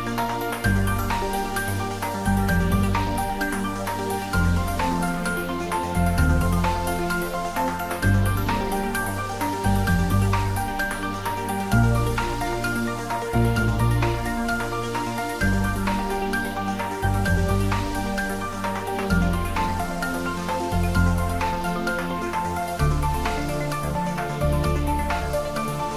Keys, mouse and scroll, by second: 1.1 click, 3.3 scroll down 1, 5.1 middle click, 6.2 scroll down 1, 10.6 Tab, 13.5-15.6 scroll up 1, 15.9-16.9 scroll up 1, 18.0-18.8 scroll down 1, 21.2-21.9 scroll down 1, 21.9 ctrl+z, 24.9-25.9 scroll up 1.